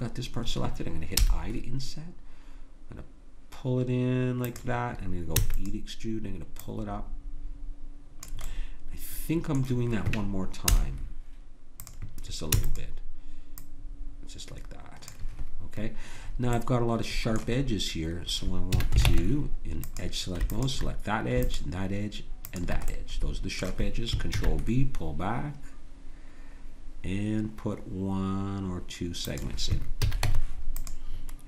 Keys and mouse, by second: 1.3 i, 5.4 e, 6.6-10.7 drag, 10.7 i, 12.5 e, 13.6-15.9 drag, 16.3-18.8 middle drag, 18.8 a, 19.1 ctrl+Tab, 20.6-22.0 drag, 24.4 ctrl+b, 30.0 a, 30.2 Tab.